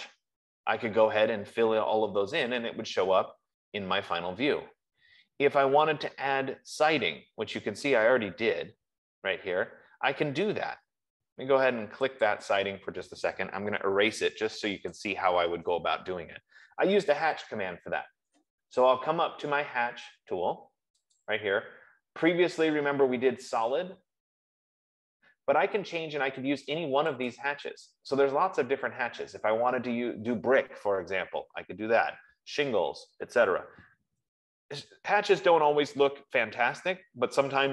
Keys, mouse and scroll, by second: 5.4 middle click, 5.9 middle click, 6.8-7.8 scroll, 8.2-9.8 scroll, 12.6 click, 14.2-15.9 typing, 14.8-17.7 drag, 21.6-26.7 drag, 27.7-32.8 drag, 35.2-35.8 scroll down 1, 35.8-36.8 scroll down 1, 36.8-37.7 scroll down 1.